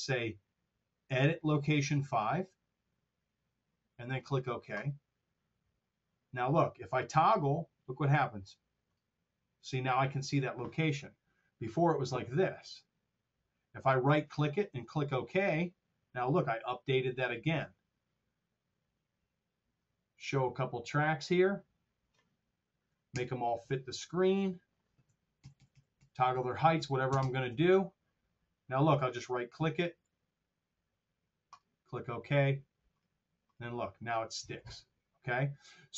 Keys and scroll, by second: 23.1 ctrl+alt+super+Down, 25.3 ctrl+alt+Down, 25.8 ctrl+alt+Up, 26.6 ctrl+alt+Down.